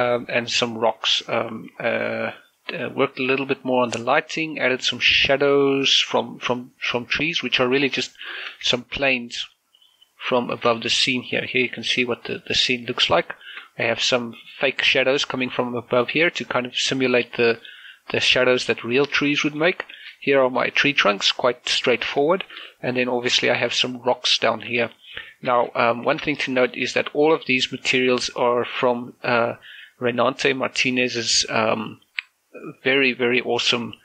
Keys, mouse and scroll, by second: 1.2 scroll down 1, 1.4 middle click, 1.7 middle click, 2.1 scroll down 1, 2.3 middle click, 7.9 middle click, 8.5 shift+space, 9.5 click, 10.9 shift+space, 11.3 middle click, 11.9 z, 12.4 middle click, 13.7 middle click, 17.3-19.9 middle drag, 19.9 shift+scroll up 1, 21.5 middle click, 23.2 scroll up 1, 23.7 right click, 25.5 shift+space, 26.4 shift+space, 26.9 shift+middle click, 27.3 scroll up 1, 27.6-29.4 shift+middle drag.